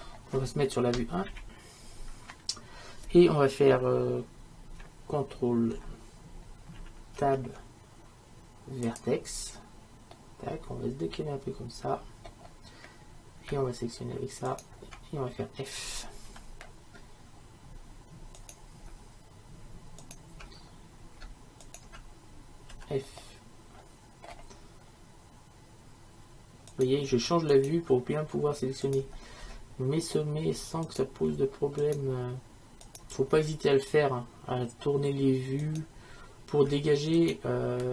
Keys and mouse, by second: 1.3 KP_1, 7.2 ctrl+Tab, 10.2-14.5 drag, 14.5-26.3 right drag, 16.3 f, 22.8 f, 26.8-29.5 right drag, 29.5 f, 33.4 f.